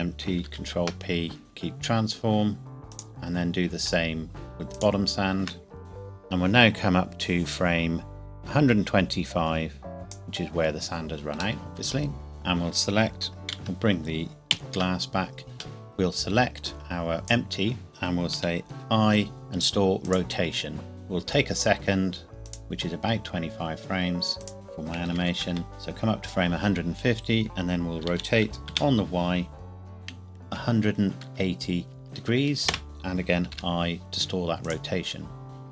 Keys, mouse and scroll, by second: 0.5 ctrl+p, 1.4 click, 4.8 shift+click, 5.8 click, 11.6 middle click, 12.3 click, 14.6 alt+h, 15.8 middle click, 17.2 click, 17.9 KP_1, 18.8 i, 20.1 click, 22.5 click, 25.0 KP_1, 25.1 KP_5, 25.2 KP_0, 25.5 KP_Enter, 28.1 r, 28.7 y, 30.5 KP_1, 31.3 KP_8, 32.0 KP_0, 32.7 KP_Enter, 33.5 i, 34.7 click.